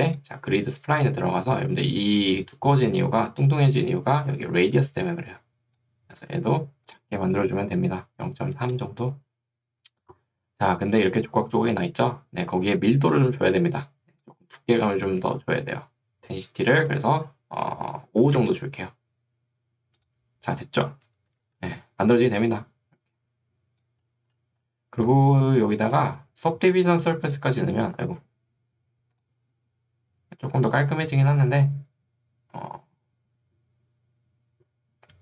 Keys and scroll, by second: 4.6 ctrl+2, 6.2 Escape, 8.4 3, 8.6 Return, 12.6 ctrl+2, 14.6 Escape, 18.2 5, 18.4 Return, 21.4 a, 22.6 3, 28.2 ctrl+z.